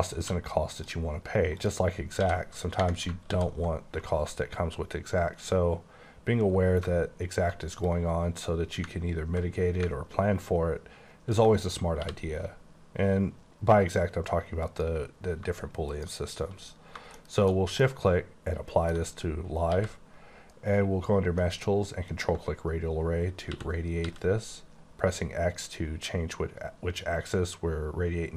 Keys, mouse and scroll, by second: 0.2 q, 0.7 click, 1.6 click, 2.0 scroll up 1, 2.2 d, 3.3 alt+w, 4.6-6.0 alt+scroll up 8, 6.2 alt+scroll down 2, 7.1-7.9 alt+scroll up 2, 8.2 click, 12.0 t, 14.7 click, 17.2 shift+middle click, 17.6 shift+scroll down 2, 17.8 middle click, 19.0 alt+scroll down 2, 19.5 scroll up 2, 19.7 q, 22.1 ctrl+click, 23.5-24.0 typing, 24.8-25.9 scroll up 5, 26.9-27.3 scroll up 3.